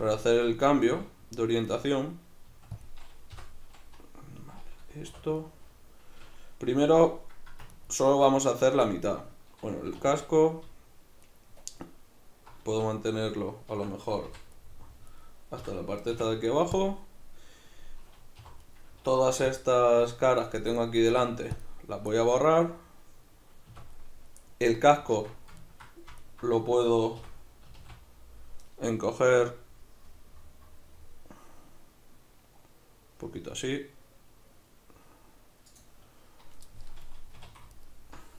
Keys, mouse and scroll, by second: 0.7 g, 1.8 right click, 2.5 s, 2.8 click, 3.3 o, 5.1 3, 5.4 right click, 7.7 ctrl+right drag, 8.2 ctrl+right click, 10.0 2, 11.2 alt+right click, 12.7 x, 13.8 Escape, 14.3 v, 15.1 right click, 15.6 l, 18.4 3, 18.6 right click, 19.3 c, 20.8 right click, 21.1 x, 22.2-26.2 ctrl+middle drag, 23.7 a, 25.2 alt+q, 26.2 alt+right click, 27.2 o, 35.7 click, 37.3 2, 37.8 alt+right click.